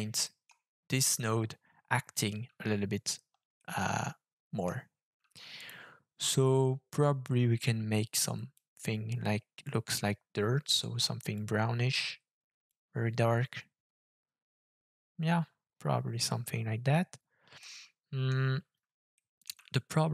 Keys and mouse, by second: 0.2 middle click, 3.6-4.6 middle drag, 5.5 click, 17.7 middle click, 19.2 middle click, 19.7-20.1 shift+middle drag.